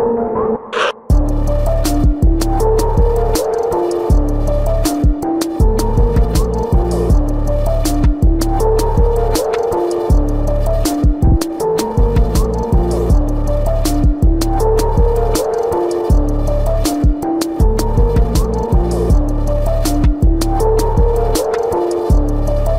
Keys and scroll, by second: 0.1 space, 1.3 space, 5.2 space, 5.9 space, 7.1 space, 7.9 space, 8.7 space, 9.9 space, 10.7 space, 15.8 ctrl+alt+z, 16.2 ctrl+alt+z, 18.6 ctrl+alt+z, 19.7 ctrl+alt+z, 22.4 space.